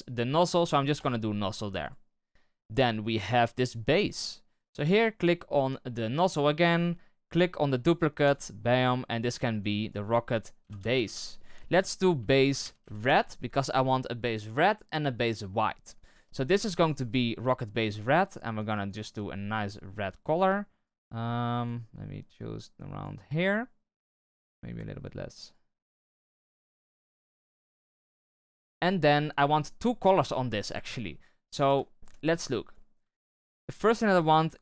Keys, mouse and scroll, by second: 6.2-12.9 drag, 17.9 click, 18.8-21.9 drag, 25.4 click, 27.3-31.4 drag, 31.4 shift+h, 31.8-32.1 shift+middle drag, 32.1-32.4 scroll up 1, 32.4-34.6 shift+middle drag.